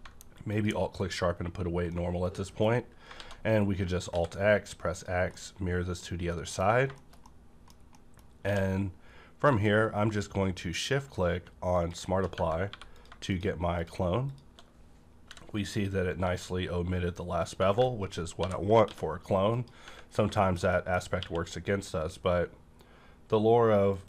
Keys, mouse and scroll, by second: 0.4 alt+click, 1.0-1.9 scroll down 2, 1.9-3.2 middle drag, 3.2 alt+x, 4.1 alt+x, 4.9 click, 5.5-6.7 middle drag, 5.5 click, 6.7 scroll up 1, 6.9 middle click, 7.2 middle click, 7.9 middle click, 8.2 scroll up 1, 8.4 q, 11.7 shift+click, 11.8 shift+click, 12.3 Right, 12.6 3, 13.0 click, 13.0 click, 13.8 shift+click, 13.8 shift+click, 14.3 shift+click, 14.7-15.3 scroll up 2, 15.3 i, 17.4 shift+click, 18.4 ctrl+i, 18.9 x, 19.4 click, 20.0 scroll down 1, 20.3 middle click, 20.7 middle click, 21.0 scroll up 1, 21.2 q, 23.9 click, 23.9 q.